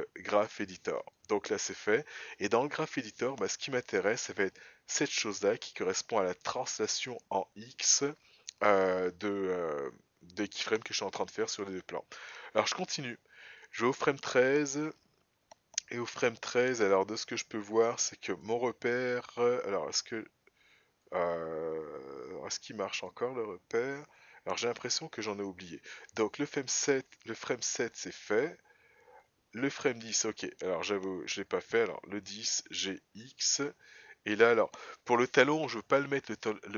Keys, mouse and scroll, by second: 12.7 click, 17.1-27.2 drag, 28.3 click.